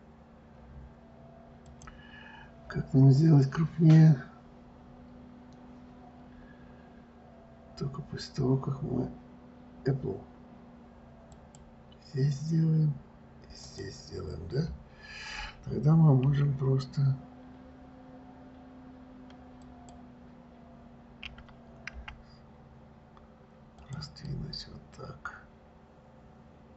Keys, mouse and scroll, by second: 2.0 click, 11.7 click, 14.0 click, 16.6 s, 21.6 s, 24.7-26.7 middle drag.